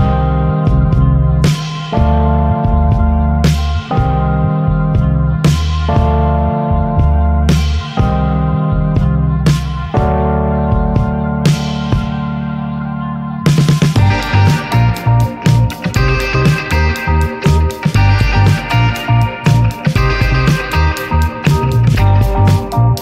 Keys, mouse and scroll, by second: 2.1 click, 3.6-6.2 drag, 6.8 click, 8.6-11.2 drag, 11.7 click, 13.6-16.7 drag, 17.2 click, 18.5-20.9 drag, 21.3 click.